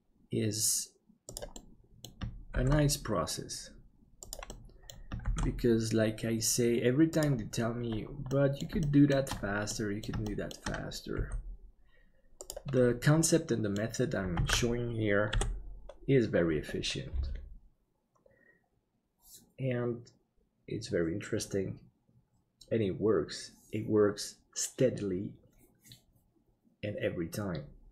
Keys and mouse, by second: 1.6 middle click, 2.6 shift+d, 4.6 middle click, 8.4 middle click, 8.9 shift+middle click, 9.8 middle click, 10.4 shift+middle click, 11.2 g, 13.4 middle click, 14.6 ctrl+s, 15.3 KP_7.